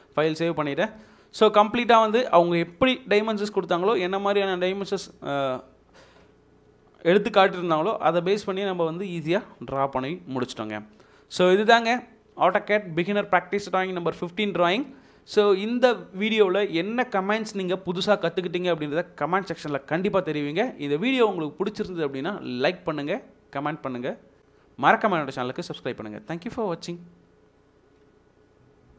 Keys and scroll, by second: 0.9 ctrl+s.